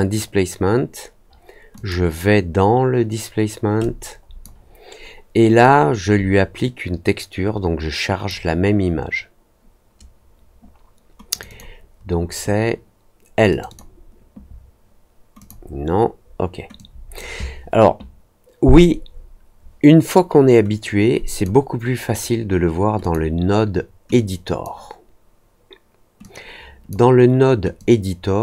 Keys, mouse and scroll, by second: 1.7 click, 3.7 click, 5.5-8.2 drag, 11.2 click, 11.4 click, 13.4 click, 13.6 click, 15.3 click, 16.7 click, 21.2 click, 22.9 click, 24.0 click, 26.1 click, 27.7 click.